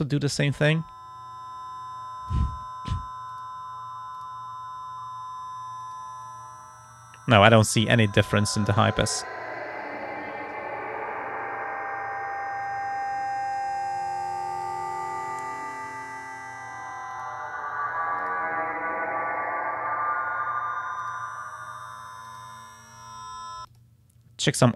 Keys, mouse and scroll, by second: 0.2-2.5 drag, 3.3 click, 4.2 click, 5.8 click, 6.3-7.8 drag, 8.3 click, 9.0 click, 12.7-13.8 drag, 14.7 click, 17.1 click, 18.2 click, 21.0 click, 22.3 click, 23.7 click.